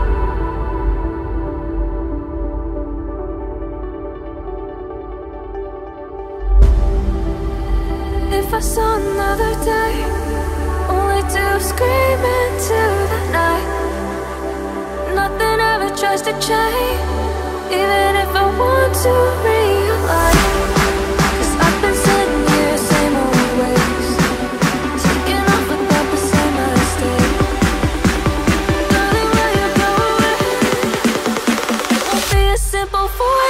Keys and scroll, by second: 1.9 ctrl+a, 6.2 ctrl+a, 31.0 alt+a.